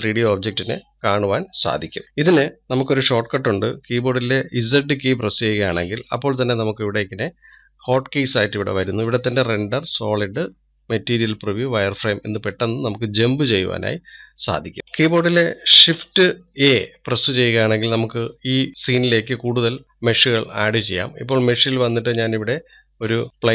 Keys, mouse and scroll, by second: 0.3-1.0 middle drag, 1.0-1.4 scroll down 2, 1.4-23.5 middle drag.